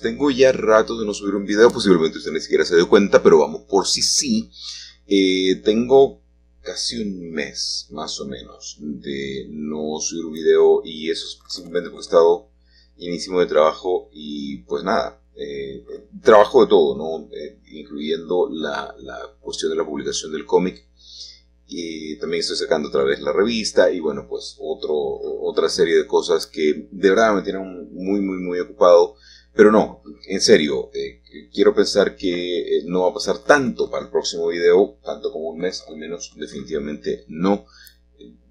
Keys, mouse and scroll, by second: 2.6-3.7 middle drag, 4.9 g, 7.9 Escape, 9.7-11.0 shift+middle drag, 11.6-13.7 middle drag, 14.2 Escape, 16.6-17.7 drag, 19.1 g, 20.6 y, 22.9 click, 23.6-25.8 middle drag, 26.4-29.9 middle drag, 31.0 click, 31.8-32.5 scroll down 1, 35.1-37.6 middle drag, 37.8-38.5 drag.